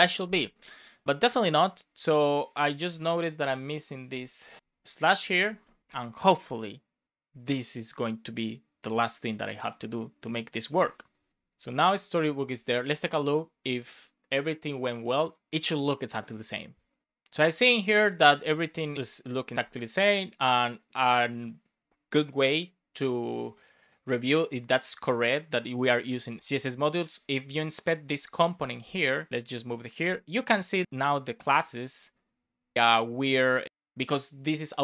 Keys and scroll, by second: 4.6 super+s, 5.8 Return.